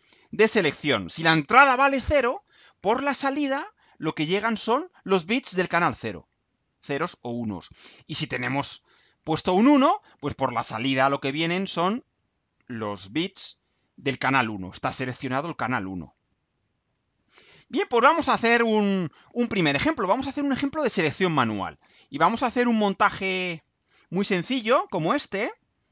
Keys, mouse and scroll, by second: 17.3 scroll down 2, 18.0 scroll down 2, 22.1-22.8 scroll down 4, 23.2-24.0 scroll down 4.